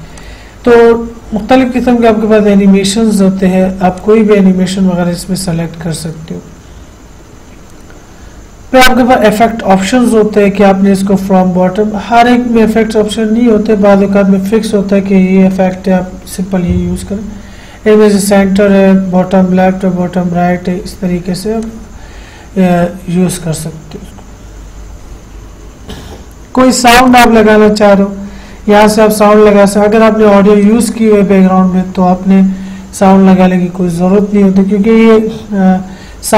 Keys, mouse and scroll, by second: 0.4 click, 0.4 click, 4.2 click, 9.4 click, 21.8 click, 21.9 click, 27.3 click, 30.8 click.